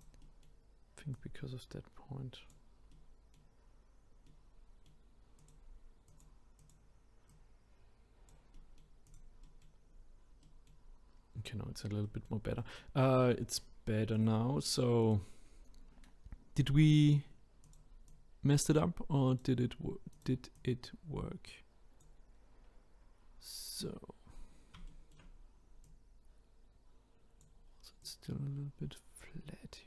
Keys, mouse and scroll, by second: 0.2-1.1 middle drag, 1.1 click, 2.9-3.7 middle drag, 3.7-4.2 scroll down 3, 4.2-5.4 middle drag, 5.4 click, 6.1 click, 6.6 click, 7.3 click, 8.5-9.0 middle drag, 9.0 click, 9.4-9.8 middle drag, 9.8-10.4 scroll up 1, 10.4-13.0 middle drag, 13.0-14.1 scroll down 5, 14.1-15.4 drag, 15.4-17.6 scroll up 5, 17.6 click, 18.1 click, 20.1 click, 20.5-22.4 drag, 22.4-23.4 scroll down 2, 24.4-24.9 scroll up 3, 24.9-25.9 shift+middle drag, 25.9 click, 28.0 click.